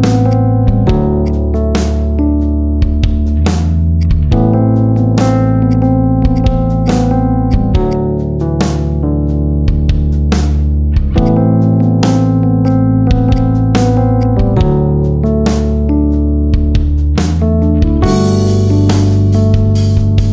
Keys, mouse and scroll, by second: 0.2 shift+click, 0.7 g, 1.4 e, 4.0-5.1 middle drag, 5.1 g, 6.3 click, 6.4-6.7 middle drag, 6.9-7.3 middle drag, 7.3 shift+click, 7.8 shift+click, 8.0-9.5 middle drag, 10.6 Delete, 11.5-12.5 middle drag, 12.5 click, 12.7-13.3 middle drag, 13.3 shift+click, 13.5 middle click, 14.1 shift+click, 14.6-15.1 scroll up 1, 15.1 Delete, 15.7-18.2 middle drag, 19.0 scroll down 3, 19.1-19.8 middle drag, 19.8 scroll up 1, 20.0-20.3 middle drag.